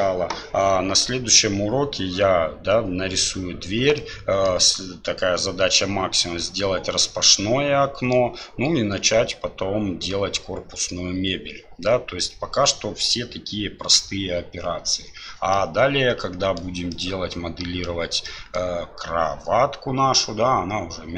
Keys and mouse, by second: 4.1-4.6 middle drag, 7.3-8.1 middle drag, 15.7-16.7 middle drag, 16.9-17.9 middle drag, 18.4 middle click.